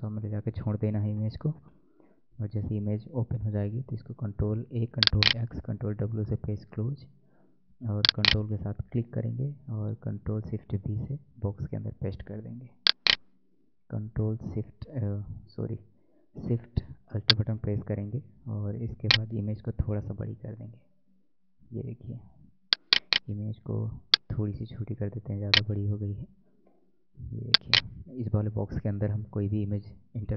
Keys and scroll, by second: 3.1 ctrl+a, 3.4 ctrl+x, 3.9 ctrl+w, 10.6 ctrl+shift+v, 29.0 alt+Tab.